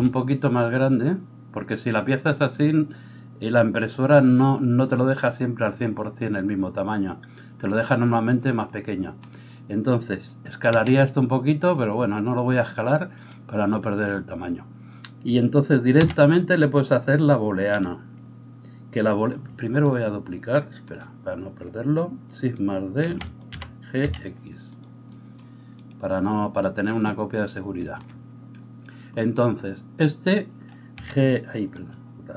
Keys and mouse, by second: 10.7 s, 16.0 g, 23.1 shift+d, 23.5-31.7 middle drag, 23.5 g, 30.9 f, 31.7 right click, 31.9-32.3 middle drag.